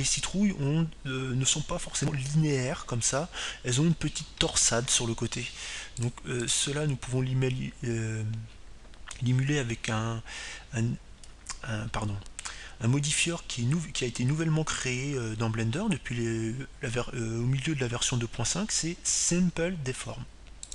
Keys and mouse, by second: 9.1-11.8 drag.